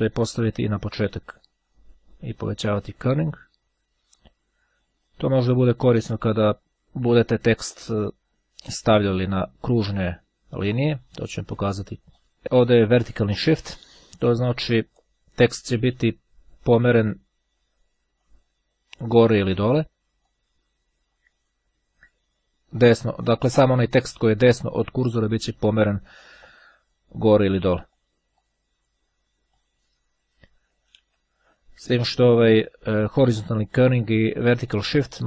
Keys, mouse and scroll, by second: 1.4-4.0 drag, 5.3-6.7 drag, 11.1-12.4 drag, 15.5 click, 18.4-20.2 drag, 26.3-27.6 drag, 28.4 click, 29.6 click, 30.6 KP_0, 31.1 KP_Enter.